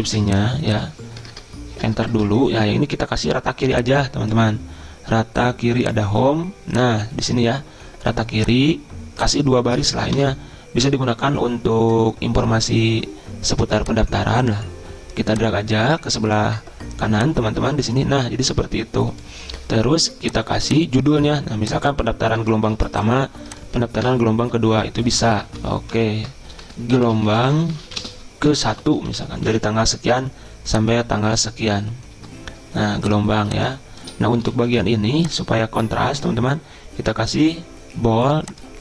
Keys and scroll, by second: 0.1 ctrl+c, 1.2 Return, 1.3 Return, 1.8 Return, 2.1 ctrl+v, 10.2 BackSpace, 22.8 ctrl+c, 24.1 Return, 24.5 Up, 25.1 ctrl+v, 25.6 ctrl+shift+Left, 26.0 ctrl+shift+Left, 26.7-30.1 typing, 34.2-34.9 typing, 36.6-37.3 typing.